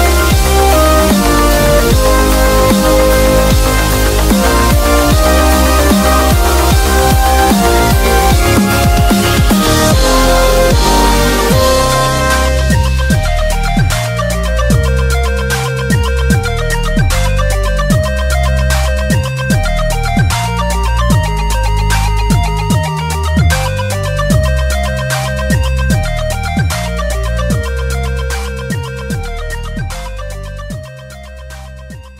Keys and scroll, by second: 16.1 super+-, 19.9-20.8 typing, 30.4 super+z.